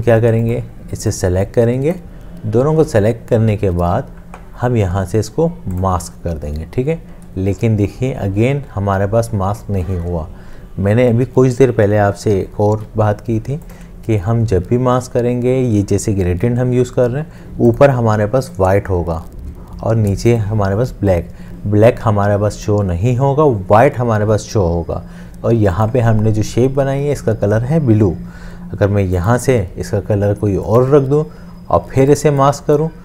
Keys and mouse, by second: 12.7 ctrl+z.